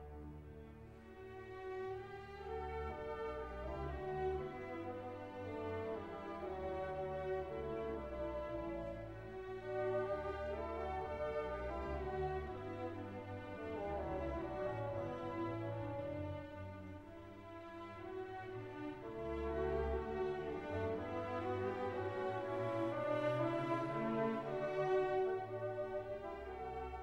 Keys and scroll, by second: 3.9 ctrl++.